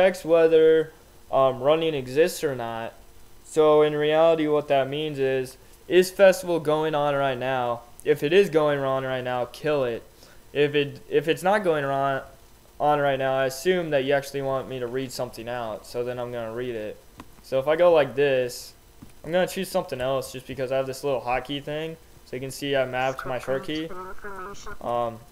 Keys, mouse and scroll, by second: 20.1 F12, 22.1 alt+x, 24.7 alt+x.